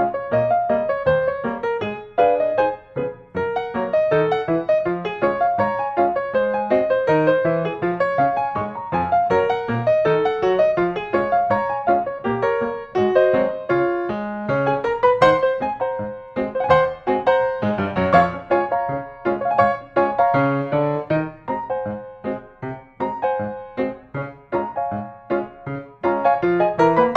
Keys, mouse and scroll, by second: 1.1 click, 2.0 click, 3.1 click, 5.1 click, 6.6-7.4 scroll, 8.9 click, 9.6 middle click, 11.5 click, 14.7 click, 15.9 click, 16.6 scroll, 20.8 click, 21.2-21.8 scroll, 22.1 scroll, 23.0 click, 24.1 click, 26.1 click, 27.0 click.